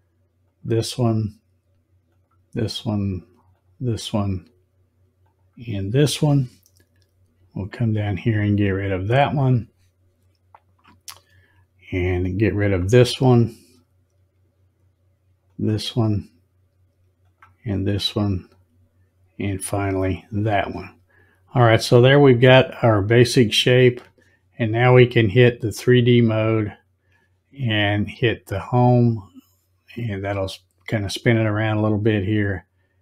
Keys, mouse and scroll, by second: 0.5 click, 2.0 click, 3.5 click, 5.2 click, 8.4 click, 12.6 click, 15.4 click, 17.2 click, 19.8 click, 26.0 click, 28.4 click.